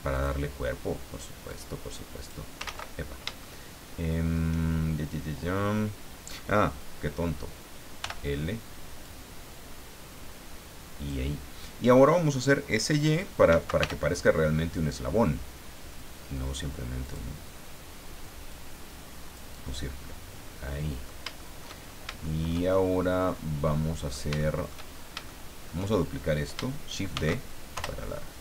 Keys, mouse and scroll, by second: 0.1 click, 1.5 click, 2.6 ctrl+z, 3.2 ctrl+shift+z, 3.4-4.5 shift+middle drag, 8.0 l, 9.0-11.3 drag, 13.5 s, 13.8 y, 17.0 click, 18.5 click, 19.6-21.2 middle drag, 21.4 shift+middle click, 21.6 shift+scroll up 2, 21.8 shift+scroll down 2, 22.2 shift+middle click, 22.7 shift+scroll down 2, 23.3-24.3 middle drag, 25.2 shift+middle click, 27.1 shift+d, 27.7 shift+Return.